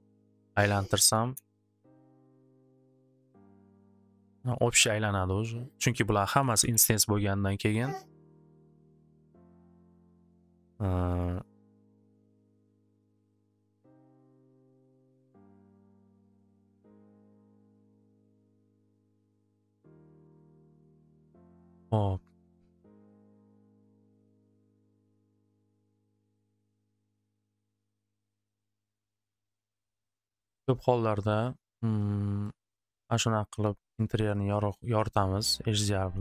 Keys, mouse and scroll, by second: 0.2 click, 0.3 click, 0.6 click, 0.7-1.6 typing, 5.5-7.0 typing, 5.7 click, 5.8 click, 7.6 click, 11.2 typing, 11.6 click, 13.9-16.8 drag, 19.1 click, 20.3-22.9 drag, 23.9 click, 25.3 click, 26.0 click, 26.7 click, 27.7 click, 28.5 click, 31.4 click, 32.4 click, 34.0 click, 34.5 click.